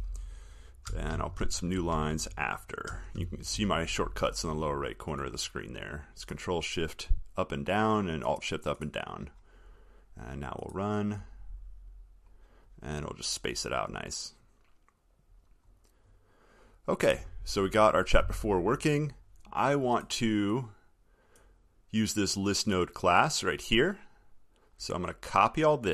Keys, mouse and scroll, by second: 1.3 ctrl+shift+Down, 3.4 alt+shift+Down.